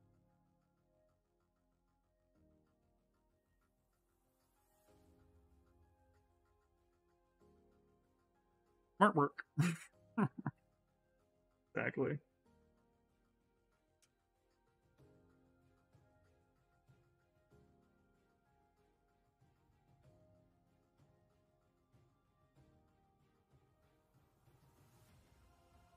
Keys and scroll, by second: 4.7-6.3 typing.